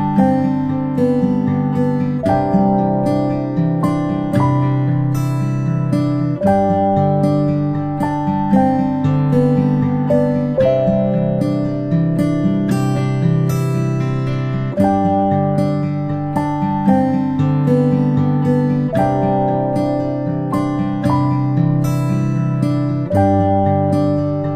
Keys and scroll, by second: 3.0 space, 5.7 ctrl+z, 12.0 ctrl+z, 12.2 ctrl+z, 12.9 space, 13.2 space, 15.4 space, 15.6 space, 15.7 space, 20.2 space, 22.3 space.